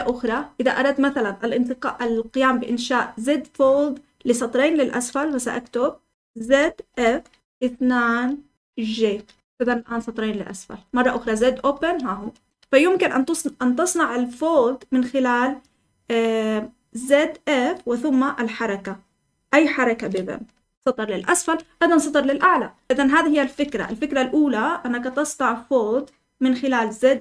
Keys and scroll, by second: 6.3-7.5 typing, 9.1 typing, 9.5 Escape, 10.1-12.5 typing, 20.5 Escape, 21.5 Escape, 22.0-24.1 typing.